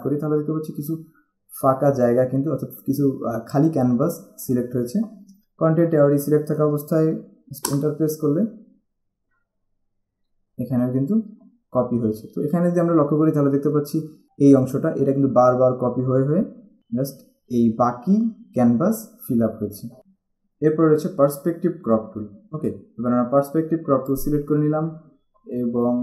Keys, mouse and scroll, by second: 7.8 alt+Return, 11.4 alt+scroll up 1, 11.9-12.5 alt+scroll up 1, 17.3-17.7 alt+scroll down 1, 19.8 alt+scroll down 1, 24.3 click.